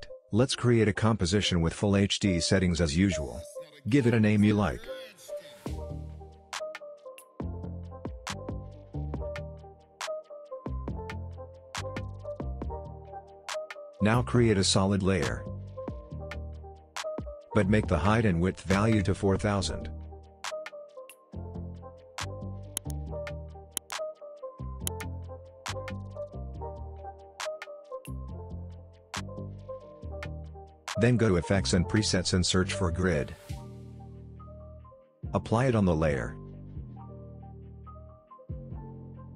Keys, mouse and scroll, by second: 2.2-4.4 typing, 8.0 click, 9.2 scroll up 1, 10.5 click, 14.6 right click, 15.6 click, 21.2 click, 24.4 click, 25.4-26.8 typing, 29.8 click, 32.6-34.0 typing, 35.1-37.0 drag, 38.5-39.2 scroll down 1, 39.2-39.3 scroll up 1.